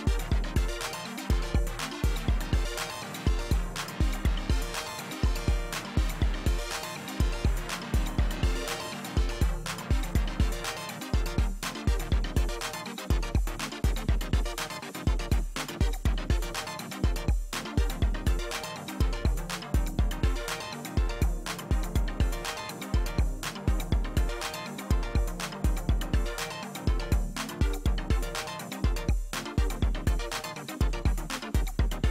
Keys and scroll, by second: 1.7 space, 11.8 space.